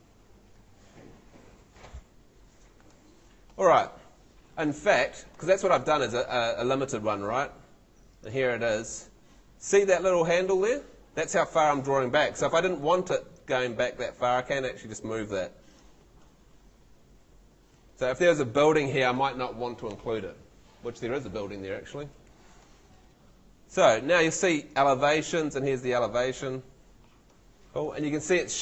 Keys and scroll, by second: 5.1 Escape.